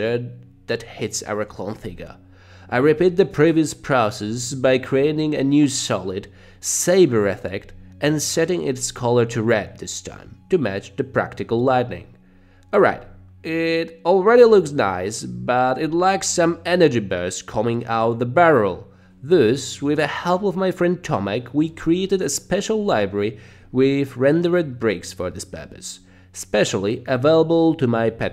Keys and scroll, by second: 0.3 space, 0.4 d, 0.9 s, 9.1-10.0 typing, 11.0 Page_Down, 12.0 Page_Up, 13.3 Page_Up, 13.4 Page_Down, 14.3 Page_Up, 15.7 space.